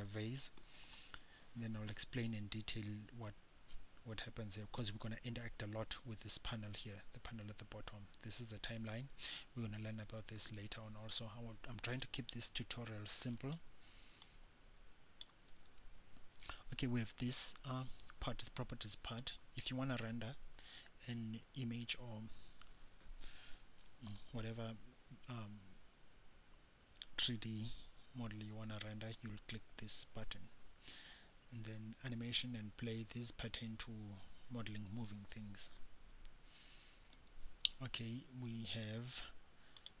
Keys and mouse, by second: 12.8 n, 16.3-19.5 middle drag, 36.3-40.0 middle drag.